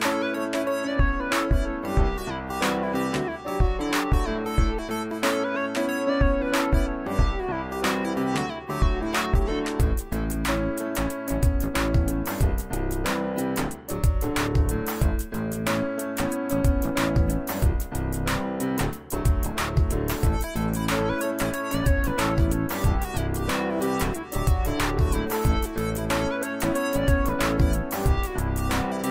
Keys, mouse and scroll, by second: 5.0-5.4 drag, 7.9-9.7 alt+shift+drag, 19.2 scroll down 1, 19.9 Delete, 21.6 click, 24.2 click, 25.7-29.1 shift+drag.